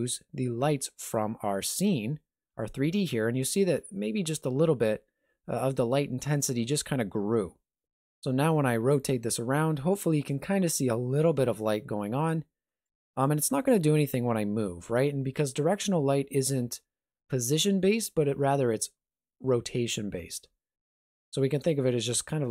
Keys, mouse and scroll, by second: 8.6 r, 13.6 g, 20.3 r.